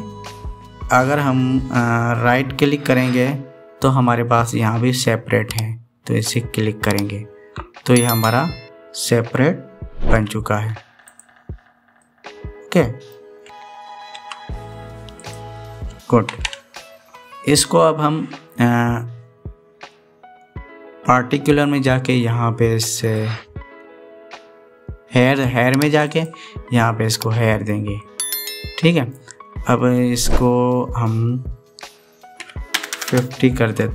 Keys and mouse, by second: 0.5 ctrl+z, 3.8-7.5 drag, 10.8 g, 11.8 click, 12.8 middle click, 13.0 click, 14.9 g, 17.0 ctrl+z, 23.6 click, 26.8 click, 28.8-29.9 middle drag, 31.1-33.9 drag, 33.6 KP_0, 33.8 KP_0.